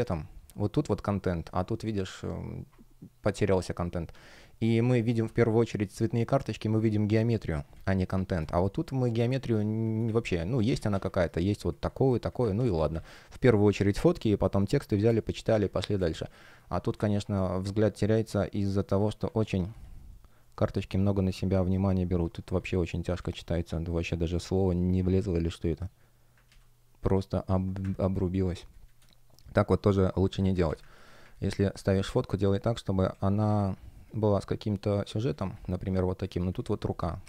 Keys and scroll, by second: 7.6 space, 9.4 space, 10.2 super+z, 11.0 shift+p, 12.4 super+z, 14.0 space, 17.2 space, 19.8 shift+o, 20.7 shift+g, 21.5 shift+p, 23.0 super+z, 26.3 super+z, 28.4 space, 30.3 super+z, 35.2 space, 37.1 Return.